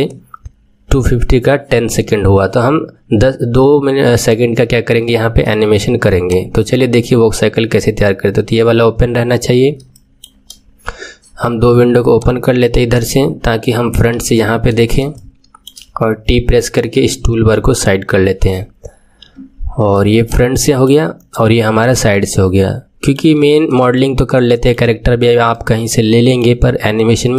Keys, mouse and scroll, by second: 6.2-9.3 drag, 9.9-12.1 shift+middle drag, 12.1-14.1 drag, 14.1 KP_1, 14.5-15.1 scroll up 2, 15.1-16.7 shift+middle drag, 16.7 t, 20.2-27.3 drag, 21.6-22.0 scroll up 2, 22.2-25.1 shift+middle drag, 25.1-25.6 scroll up 2, 25.6-27.3 shift+middle drag.